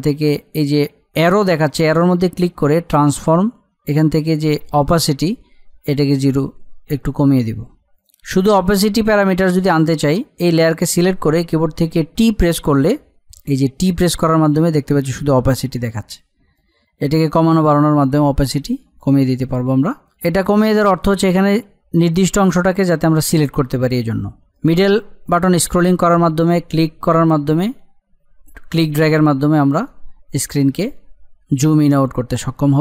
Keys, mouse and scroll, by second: 1.6 click, 5.9-7.9 drag, 13.7 t, 16.5-20.3 drag, 20.3 click, 24.6 middle click, 25.0-25.6 scroll up 1, 25.6-32.3 middle drag.